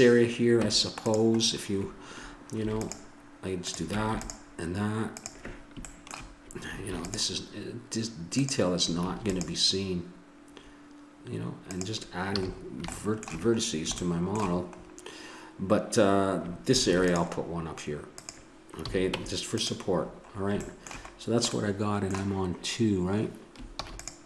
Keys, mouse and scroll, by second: 0.6 Tab, 2.6 ctrl+r, 4.1 ctrl+r, 6.5-7.6 drag, 6.9 ctrl+r, 9.2 ctrl+r, 12.4 a, 15.5-16.8 middle drag, 16.8 ctrl+r, 18.8 a, 19.1 Tab, 23.7 ctrl+s.